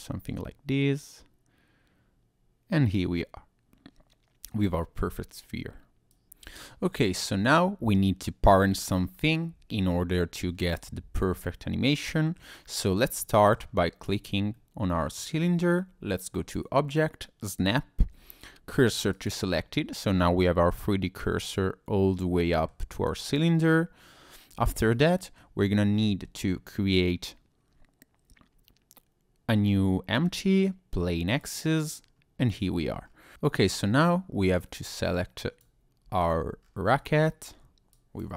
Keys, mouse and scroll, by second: 0.3 click, 6.1 click, 6.9 middle click, 7.4-8.1 scroll down 2, 8.1 middle click, 8.8-9.1 scroll up 2, 9.1-9.6 scroll down 1, 9.6 scroll up 1, 9.7 middle click, 10.5 scroll down 1, 11.5 middle click, 12.4 scroll down 1, 12.6-13.0 scroll up 2, 13.2 shift+middle click, 14.0 click, 14.5 middle click, 15.3-16.1 scroll up 2, 16.3 click, 19.7-21.3 scroll down 1, 22.4 middle click, 23.2 click, 24.6 scroll up 1, 24.9 middle click, 25.6-26.0 scroll down 2, 26.0 shift+a, 32.4 click, 32.4-33.0 scroll down 2, 33.0 scroll up 2, 33.3 scroll down 2, 33.6-34.0 scroll up 2, 35.0 middle click, 35.0 click, 36.2 shift+click, 36.6-37.1 scroll down 3, 37.9 ctrl+click.